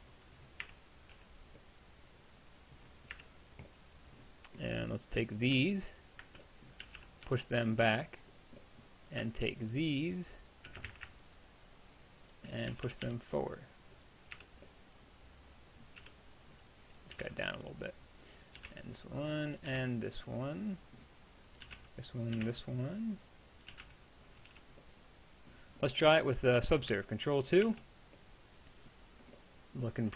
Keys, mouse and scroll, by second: 0.7 Tab, 1.2 z, 3.2 Tab, 6.8 g, 10.3 middle click, 10.9 ctrl+z, 12.7 g, 14.4 Tab, 16.0 Tab, 17.2 g, 24.5 Tab, 27.7 ctrl+2.